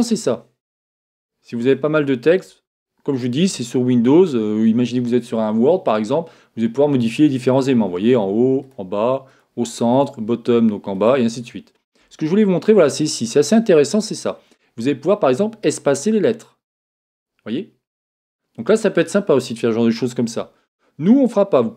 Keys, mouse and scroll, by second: 4.0-5.9 middle drag, 7.5-12.9 drag, 14.4 click.